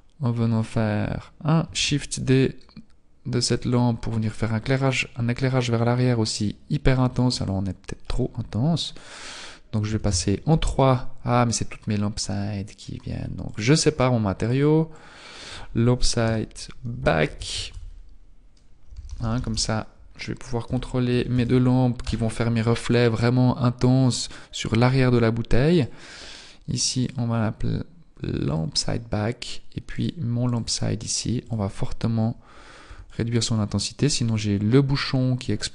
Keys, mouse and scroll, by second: 1.8 shift+d, 4.6-5.2 scroll up 9, 5.8-6.5 scroll up 3, 10.4 click, 21.9 BackSpace, 25.7 right click, 28.5 click, 29.9 right click, 30.3 right click, 33.3 click.